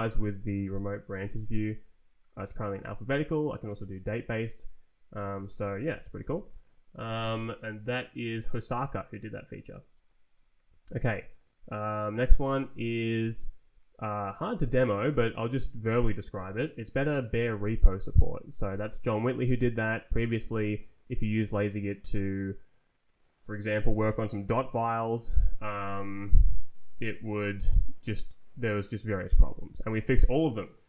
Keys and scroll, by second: 1.0 s, 1.5 Down, 2.3 Up, 2.9 Down, 3.5 Return, 5.5 Escape, 6.0 [.